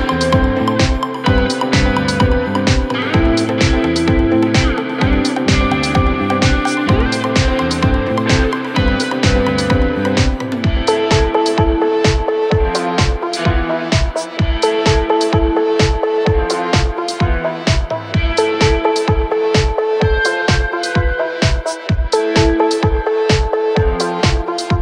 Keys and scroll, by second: 17.3 F3, 17.6 Escape.